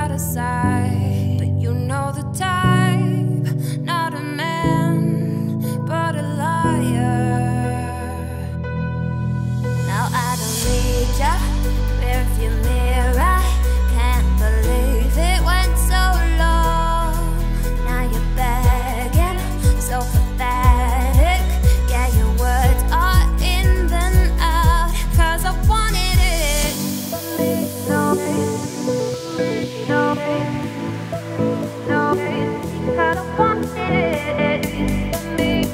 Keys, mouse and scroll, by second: 1.1 middle click, 1.3-2.1 scroll up 2, 1.4 Tab, 2.1 scroll down 3, 3.0 click, 3.6 click, 4.0 Tab, 4.5 a, 4.8-5.4 scroll down 1, 5.4-5.7 scroll up 2, 5.7-6.8 shift+middle drag, 6.8 e, 14.0 Tab, 14.2 click, 14.3 Tab, 14.6 scroll down 2, 14.8 3, 14.9 click, 15.3 g, 19.7-21.1 scroll up 1, 21.1 g, 22.0 Tab, 22.4 click, 22.8 shift+click, 23.2 g, 24.7 click, 24.9 Tab, 25.5 g, 26.4 Tab, 26.9 click, 27.6 Tab, 28.4 g, 30.7 click, 31.3 click, 32.9 click, 33.3 a, 34.1-34.6 scroll up 3, 34.6 e.